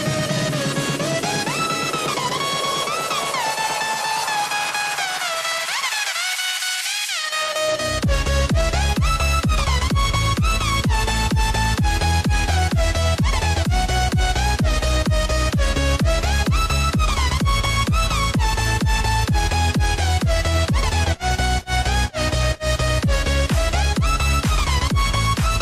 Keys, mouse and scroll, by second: 0.6 shift+click, 1.6 shift+click, 2.4 shift+click, 4.6-6.1 drag, 6.1 ctrl+b, 12.1 Tab, 13.0 click, 14.5 Tab, 15.2 ctrl+z, 19.1 click, 20.1-22.2 drag, 22.5-25.6 drag.